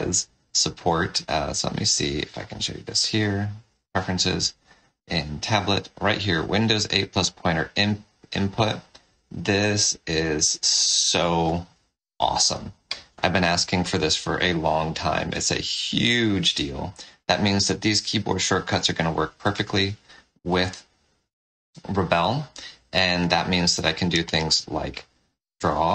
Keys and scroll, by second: 14.2 ctrl+z, 20.5 space, 23.6 shift+n.